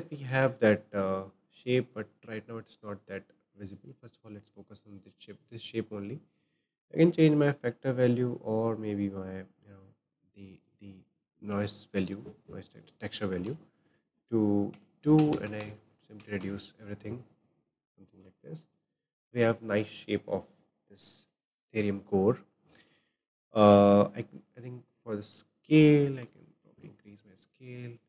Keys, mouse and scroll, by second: 1.8 click, 3.2-3.6 scroll up 4, 5.6-8.5 shift+middle drag, 9.0-11.9 middle drag, 11.9-13.4 drag, 13.4-14.8 middle drag, 14.8 click, 17.6 click, 18.4-22.5 shift+middle drag, 25.2-28.0 drag.